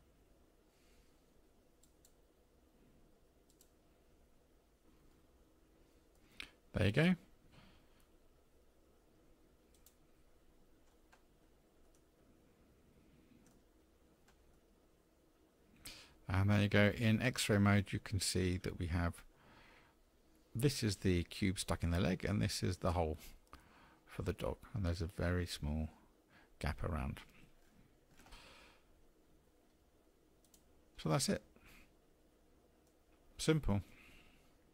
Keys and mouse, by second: 1.6-3.5 drag, 4.1-5.1 drag, 5.1-6.1 middle drag, 9.7 click, 11.8-13.5 middle drag, 14.5-15.9 middle drag, 31.4-32.9 middle drag.